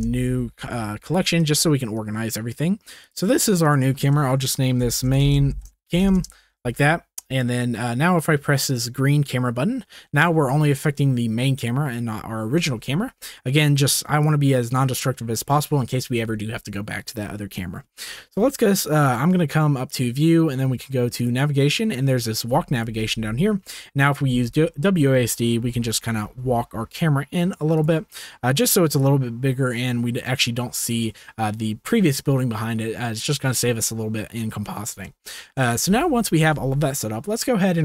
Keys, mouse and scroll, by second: 1.3 shift+click, 2.0 click, 3.8 click, 4.3-5.4 shift+drag, 5.4 shift+middle click, 14.3 click, 14.4 middle click, 15.5 shift+middle click, 19.8-23.6 drag, 24.2-26.2 typing, 27.7 click, 29.0-30.9 drag, 35.2-35.5 shift+middle drag, 36.0 ctrl+s.